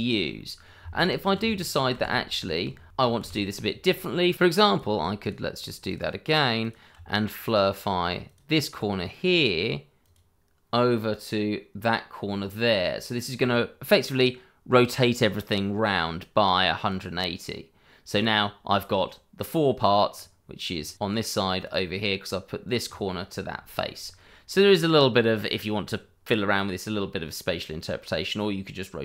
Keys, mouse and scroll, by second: 0.3 middle click, 1.4 ctrl+z, 2.9 ctrl+z, 3.9 click, 4.6 click, 5.2 shift+click, 7.4 click, 16.9 click, 20.1 scroll up 1, 20.9 click, 21.9-23.5 scroll down 1, 23.7 shift+middle click, 24.0-24.5 scroll up 1, 24.5 middle click, 25.9-26.4 scroll down 1, 26.4 middle click, 28.9-29.0 scroll up 1.